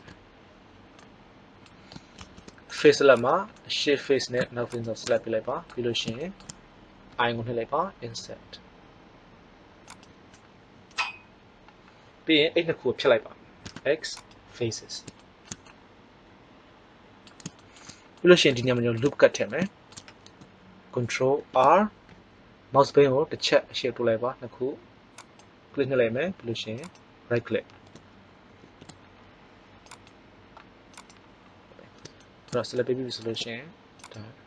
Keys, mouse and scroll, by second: 2.1 ctrl+Tab, 3.1 click, 3.5-5.1 middle drag, 7.0 i, 13.6 x, 21.3 ctrl+r, 28.5 ctrl+r, 33.9-34.4 right drag.